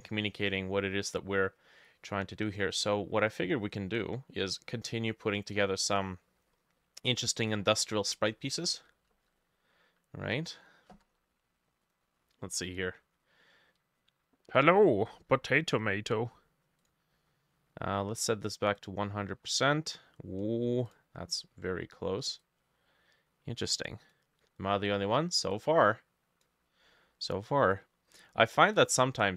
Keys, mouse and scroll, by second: 0.5 middle click, 3.7 middle click, 4.5 middle click, 5.3 middle click, 6.0 middle click, 6.4-7.5 scroll up 3, 8.6 ctrl+n, 11.0 Escape, 17.8 middle click, 19.5-20.1 scroll down 1.